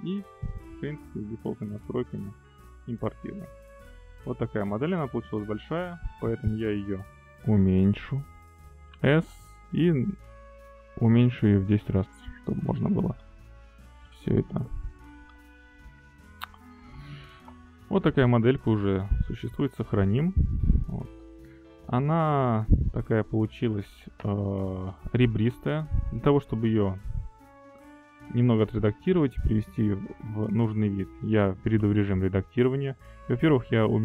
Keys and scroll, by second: 9.5 s, 10.3 0, 10.6 ., 11.2 1, 11.7 Return, 12.4 Down, 14.6 Pause, 19.9 ctrl+s.